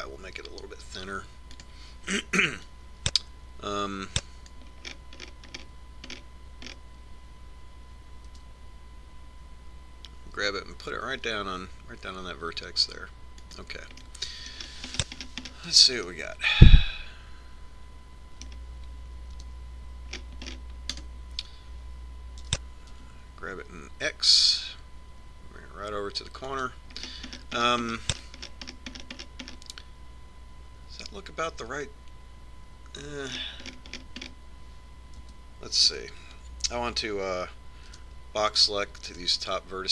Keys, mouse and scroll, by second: 0.2 s, 4.4-5.7 drag, 6.3-10.1 middle drag, 9.7 g, 15.5-19.5 middle drag, 20.9 KP_1, 21.6-24.4 drag, 24.0 g, 28.5-37.9 middle drag, 36.8 a, 37.5 z, 39.5 b.